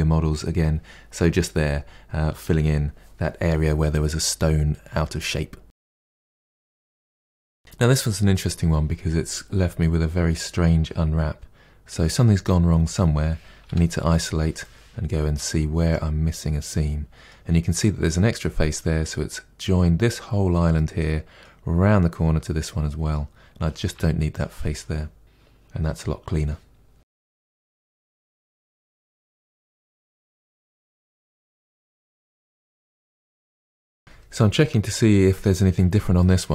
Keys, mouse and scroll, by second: 0.0 middle drag, 0.3 click, 0.4 middle click, 0.6 1, 0.7 click, 0.8 g, 1.2 Tab, 1.3 scroll down 5, 1.4-1.9 middle drag, 1.9 scroll up 2, 2.0 Tab, 2.0 middle click, 2.3 2, 2.4 alt+click, 2.6 alt+shift+click, 2.9 shift+click, 3.0 shift+click, 3.2 shift+click, 3.3 shift+click, 3.7 ctrl+e, 3.8 middle click, 4.2 click, 4.4 shift+click, 4.5 shift+click, 4.7 shift+click, 5.1 shift+click, 5.3 shift+click, 6.1 ctrl+e, 6.2 middle click, 6.3 click, 6.5 alt+shift+click, 6.6 middle click, 6.9 ctrl+e, 7.0 a, 7.5 u, 13.6 KP_Divide, 14.6-23.9 middle drag, 23.9 3, 24.3 click, 25.9 Delete, 26.7 a, 27.2 u, 27.8 KP_Divide, 28.0 scroll down 2, 28.1 shift+middle click, 29.0-29.4 scroll down 2, 29.2 shift+middle click, 29.4-31.3 shift+middle drag, 31.3 Tab, 31.4 middle click, 31.8 click, 31.9 KP_Decimal, 32.2 Tab, 32.3 middle click, 33.6-36.5 shift+middle drag.